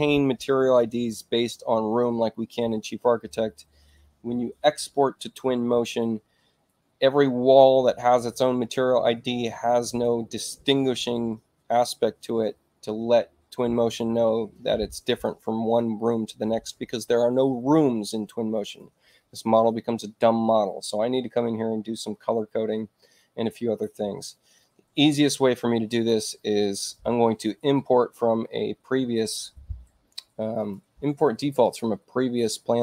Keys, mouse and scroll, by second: 25.8 click, 30.5 click, 31.5 click.